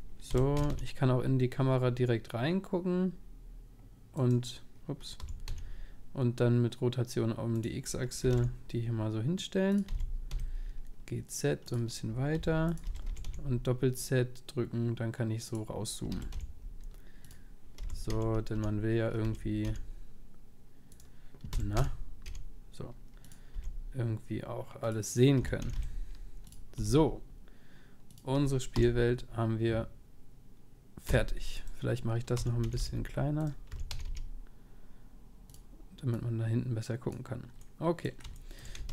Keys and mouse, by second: 0.3 r, 5.2 r, 8.2 r, 9.9 g, 12.4 g, 12.9 g, 16.2 g, 17.9 r, 23.5 g, 25.4 g, 26.8 g, 31.1 p, 32.3-33.7 right drag, 32.3 s, 33.7 s, 36.1-38.9 drag, 37.6-38.9 middle drag.